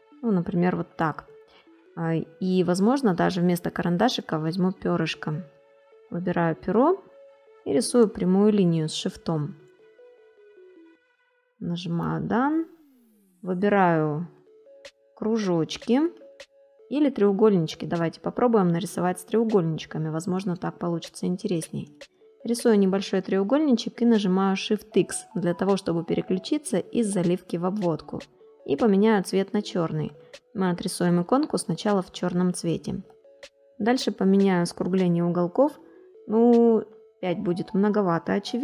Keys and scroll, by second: 0.6 ctrl+z, 8.8 ctrl+shift+a, 11.5 space.